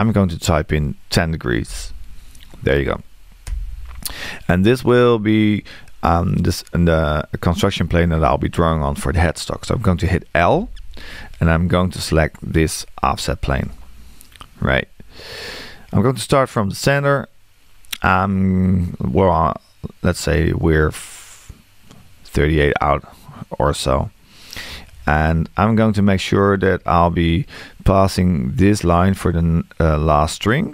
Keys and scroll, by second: 1.6 1, 10.5 l.